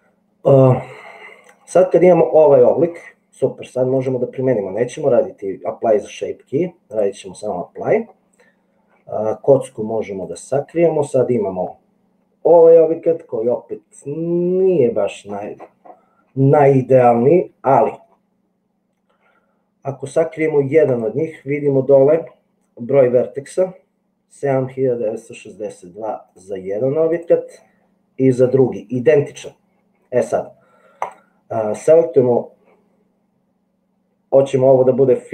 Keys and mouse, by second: 4.4-7.2 drag, 16.7-18.1 middle drag, 20.9 click.